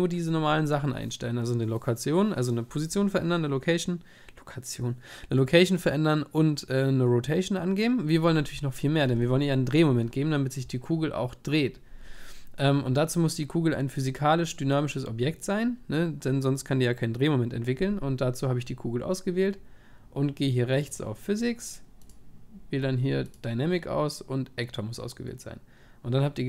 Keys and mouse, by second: 13.9-19.9 right drag.